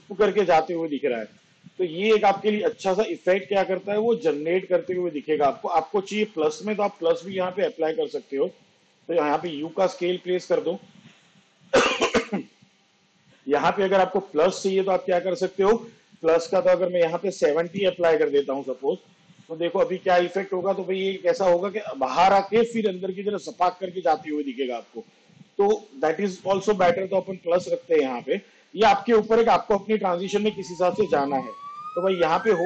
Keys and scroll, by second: 1.4 space, 3.0 space, 9.4 u, 17.5 7, 21.1 space, 27.8 space, 29.7 space.